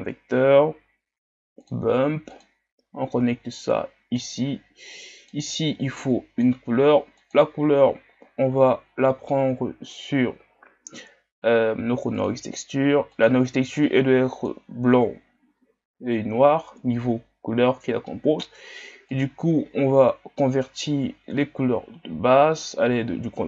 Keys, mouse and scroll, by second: 8.4 click.